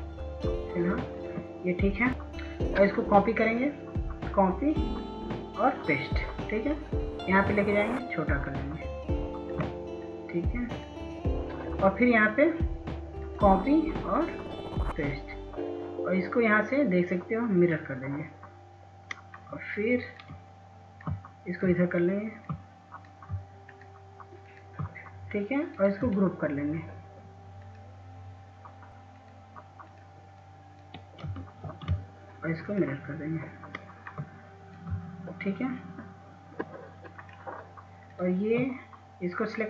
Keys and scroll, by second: 33.9 ctrl+z.